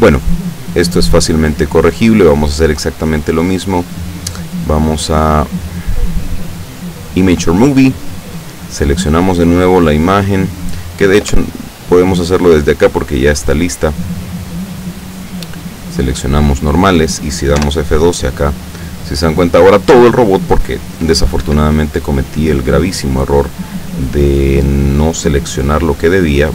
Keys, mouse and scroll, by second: 0.5 click, 4.8 click, 6.9 click, 8.4 middle click, 9.1 click, 11.2 Escape, 12.2 click, 13.1 click, 14.3-15.2 scroll down 4, 16.3 click, 17.7 F12, 21.5 Escape.